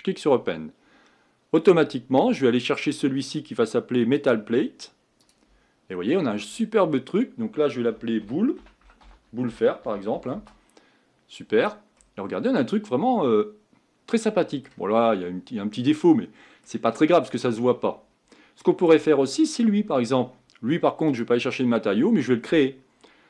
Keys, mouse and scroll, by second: 4.3-10.3 drag, 12.0-15.0 middle drag, 15.0-16.1 scroll up 3, 16.1 middle click, 16.9-18.3 scroll down 12, 18.3 middle click, 18.9-19.6 scroll up 1, 19.6 click, 21.2-23.2 drag.